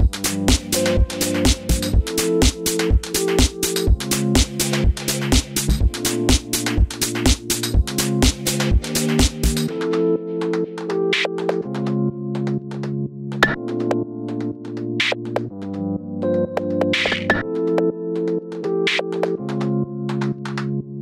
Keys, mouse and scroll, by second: 0.4 scroll down 2, 1.3 click, 4.9-6.3 middle drag, 6.3 click, 6.9 g, 7.7 shift+Tab, 8.0 g, 10.0 r, 13.9 click, 13.9 g, 14.8 click, 15.0-15.9 middle drag, 15.9 click, 16.2-19.6 middle drag, 16.8 g, 19.6 s, 20.6 click, 20.7-21.0 middle drag.